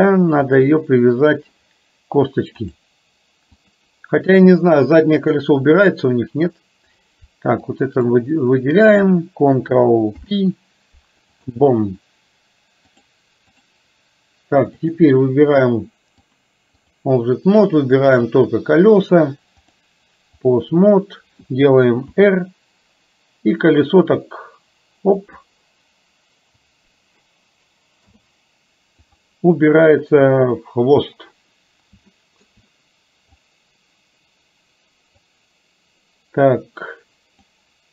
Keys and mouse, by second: 0.5 shift+click, 2.8 click, 7.8 click, 10.2 ctrl+p, 13.0 click, 14.8 click, 16.5 click, 19.9 click, 22.3 r, 28.0 i, 32.3 shift+middle click, 33.5-35.3 drag, 37.5-37.9 drag.